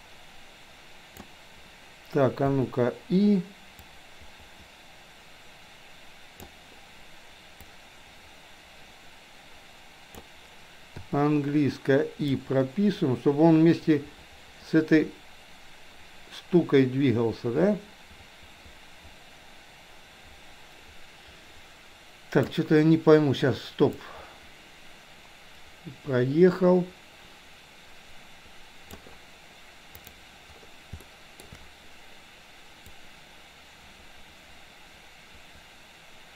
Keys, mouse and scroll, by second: 2.6 i, 3.9-6.6 drag, 7.7-10.3 drag, 11.1 i, 12.4-22.7 drag, 24.1-29.1 drag, 30.1 click, 31.2 shift+middle click, 32.9-36.3 drag.